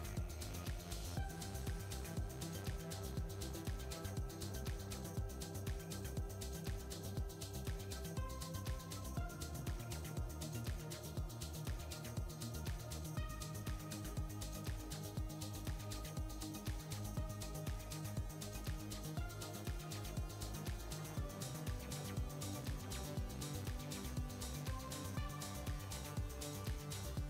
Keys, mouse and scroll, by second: 4.3 g, 18.4 r.